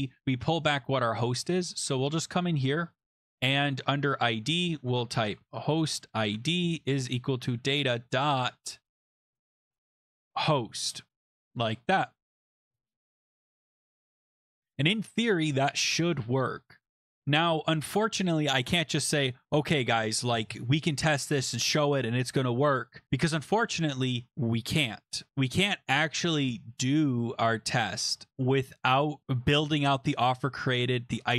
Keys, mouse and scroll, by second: 1.3 click, 1.3-1.7 scroll, 4.3 click, 4.9 Return, 5.0-8.6 typing, 9.3 click, 9.9 click, 10.0 click, 10.4 ctrl+c, 11.3 click, 11.5 ctrl+v, 12.2 ctrl+d, 12.2 ctrl+s, 13.2 click, 13.4-14.1 scroll down 2, 14.1-14.6 scroll up 4, 16.4 scroll down 2, 16.6 scroll.